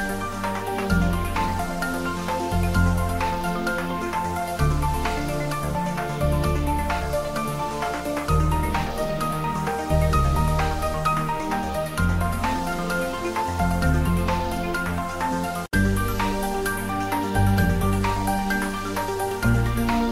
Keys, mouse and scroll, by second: 0.3 ctrl+a, 0.6 click, 1.0 Tab, 1.4 ctrl+b, 3.2-3.8 scroll up 2, 3.8 v, 5.3 c, 6.6 v, 8.0 click, 8.1 Tab, 8.4-9.6 middle drag, 9.8 ctrl+z, 10.3 middle click, 10.9 g, 12.0 click, 12.9 ctrl+b, 15.2 click, 15.4 Tab, 15.5-17.1 middle drag, 17.1 shift+middle click, 17.9 Tab, 18.3 click, 19.0 ctrl+r.